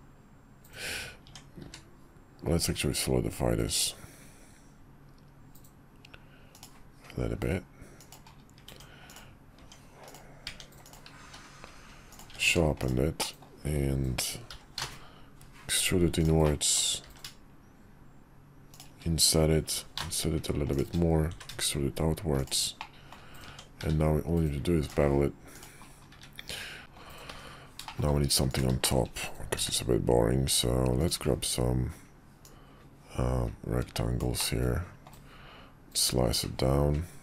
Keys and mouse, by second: 1.2 Tab, 1.6 q, 8.6 Tab, 9.1-9.6 drag, 9.6 Tab, 10.0 click, 10.4 Tab, 11.2 q, 12.4 ctrl+Tab, 13.2 middle click, 14.5 i, 16.4 middle click, 17.0 e, 19.7 i, 21.3 e, 22.8 middle click, 23.4 Tab, 23.8 q, 26.1 `, 26.8 middle click, 27.3 `, 27.8 middle click, 28.8 middle click, 29.5 d, 32.4-36.8 middle drag, 34.5-37.2 drag.